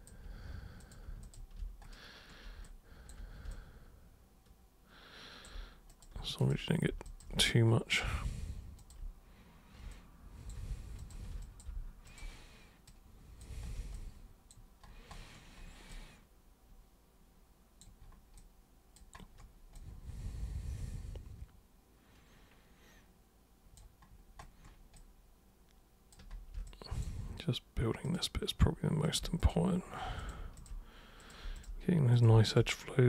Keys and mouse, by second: 0.8 ctrl+super+click, 1.2 ctrl+shift+super+click, 2.6 alt+super+click, 3.5-5.4 alt+super+drag, 5.9 super+click, 6.4 shift+super+click, 7.0 shift+super+click, 7.4 alt+super+click, 8.8 super+click, 9.9 alt+super+click, 11.0 shift+super+click, 11.4 alt+super+click, 12.0 shift+super+click, 12.9 super+click, 13.9 alt+super+click, 15.9-17.8 alt+super+drag, 18.3 alt+super+click, 19.7-23.8 alt+super+drag, 24.4 click, 24.9-26.1 drag, 26.7 click, 28.1 alt+click, 29.1 super+click, 29.4 shift+super+click, 30.2 super+click, 30.6 shift+super+click, 31.2 super+click, 31.6 shift+super+click, 32.1 super+click, 32.5 shift+super+click.